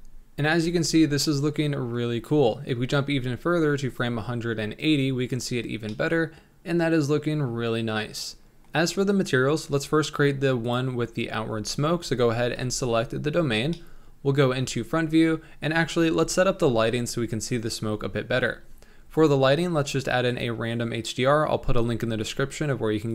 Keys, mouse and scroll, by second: 0.6-1.2 scroll up 6, 1.2 middle click, 2.1 scroll down 3, 5.1 click, 5.9-10.8 middle drag, 10.8 click, 12.6 KP_1, 13.4-13.7 scroll up 2, 13.7-15.0 shift+middle drag, 15.0 scroll down 1, 22.3 click.